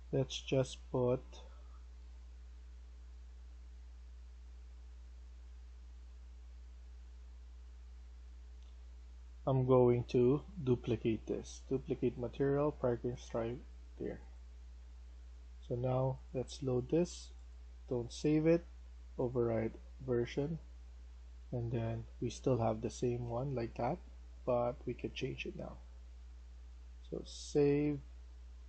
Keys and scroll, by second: 24.3 Escape.